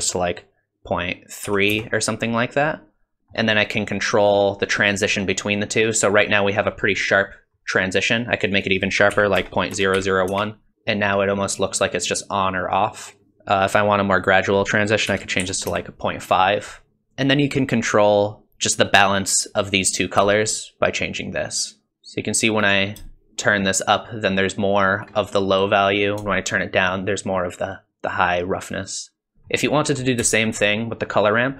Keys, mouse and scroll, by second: 2.6 middle click, 3.2 shift+middle click, 6.2 middle click, 6.9-7.3 scroll up 3, 7.3 middle click, 8.5 click, 10.7 middle click, 10.7 scroll down 3, 11.3-11.9 scroll up 2, 11.7 middle click, 12.1 middle click, 14.1 click, 16.5-17.0 scroll down 2, 16.8 middle click, 20.4 shift+click, 23.1 shift+click, 26.4 shift+click, 29.3 middle click, 29.8 middle click, 31.0 click.